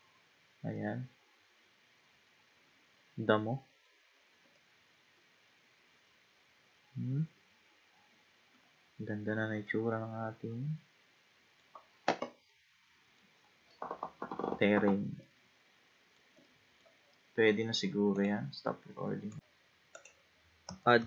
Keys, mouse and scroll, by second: 0.0-0.8 scroll down 1, 0.8-3.8 middle drag, 4.6-7.6 middle drag, 9.0-9.5 scroll down 1, 9.7-19.4 middle drag, 19.4 click, 20.0 click, 21.0 shift+a.